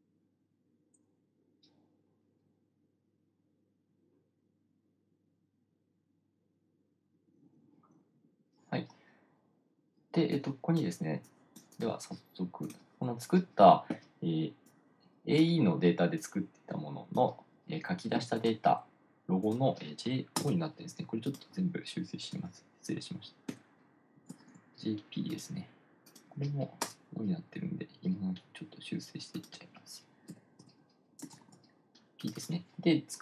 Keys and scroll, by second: 20.7 Return, 23.9 BackSpace, 24.9 p, 27.3 Return, 27.7 Left, 27.9 Left, 28.1 Left, 30.7 Left, 31.1 BackSpace, 31.9 p.